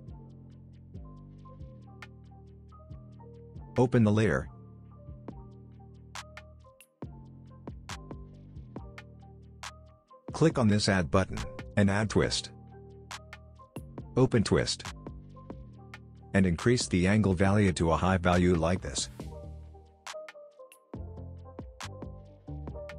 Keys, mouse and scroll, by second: 17.0-17.9 drag.